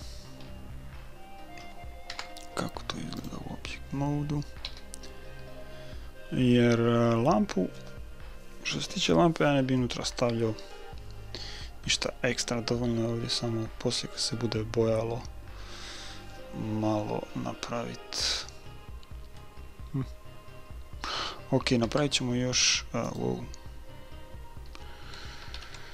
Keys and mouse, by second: 2.1 Tab, 3.7-7.0 middle drag, 4.7 a, 9.8-11.5 middle drag, 19.4-21.2 middle drag, 21.9 Tab, 23.1-24.7 right drag, 24.7 middle click, 25.5 ctrl+z.